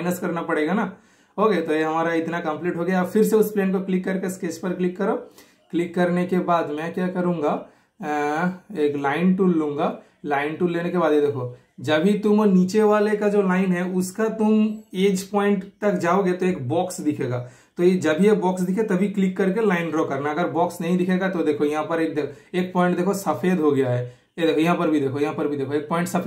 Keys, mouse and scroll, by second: 3.4 super+click, 5.8-7.1 super+middle drag, 10.5 super+middle click, 10.6 super+click, 11.4 typing, 11.6 super+click, 13.3 super+click, 16.1 super+click, 18.1 super+click, 19.0 typing, 19.2 super+click, 20.7 super+click, 20.7 typing, 25.8 super+click, 25.8 typing.